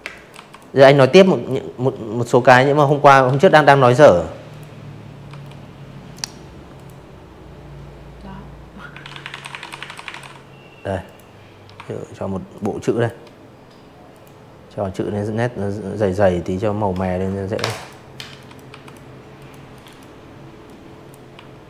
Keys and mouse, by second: 0.2 z, 0.3 click, 0.6 space, 0.8 v, 1.4 click, 2.2 v, 3.1 click, 3.7 click, 5.6-7.6 typing, 8.0 click, 9.5 shift+click, 11.0 click, 14.7 click, 15.2 z, 15.3 click, 15.6 v, 15.8 click, 16.3 click, 16.7 click, 16.8 click, 17.6 click, 18.3 Delete, 19.0 click, 19.4 Delete, 20.3 click.